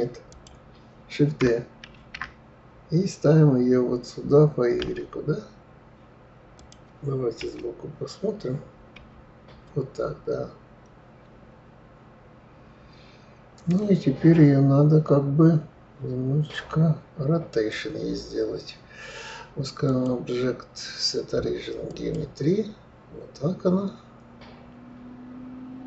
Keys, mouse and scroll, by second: 0.0 click, 0.6 click, 2.3 shift+d, 7.7 KP_1, 17.8 click, 20.2-23.2 drag.